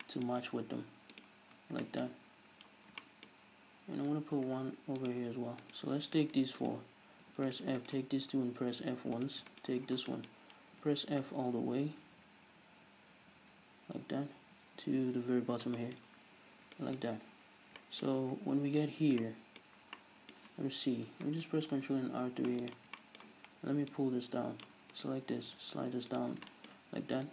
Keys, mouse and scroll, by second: 0.7 ctrl+r, 1.3 click, 1.6 scroll down 1, 1.9-5.1 shift+middle drag, 2.3 scroll up 1, 3.5-4.4 scroll up 1, 4.4 ctrl+r, 5.1 click, 5.7 right click, 6.1 shift+right click, 6.4 shift+right click, 6.6 shift+right click, 7.4 f, 7.5-8.1 right drag, 8.4 f, 9.2 right click, 9.5 shift+right click, 9.9 scroll down 2, 10.1-22.8 shift+middle drag, 10.3-10.9 scroll up 1, 10.9 f, 15.6 scroll down 1, 16.1-16.8 scroll up 1, 17.4-17.8 scroll up 1, 18.2-18.7 scroll up 1, 21.7 ctrl+r, 22.8 click, 23.0 shift+middle click, 24.0-25.0 drag, 25.0 right click, 25.5 g, 26.3 click, 26.4 scroll down 2, 26.5 shift+middle click, 27.2 shift+right click.